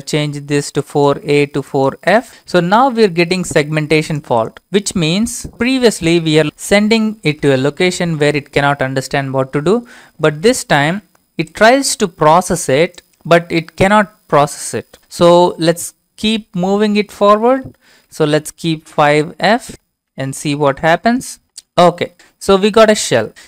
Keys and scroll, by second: 2.3 Return, 15.4 Up, 16.4 Left, 16.9 Left, 17.0-17.6 Left, 18.2 Left, 19.0 BackSpace, 19.2 f, 19.7 BackSpace, 19.9 5, 21.4 Return.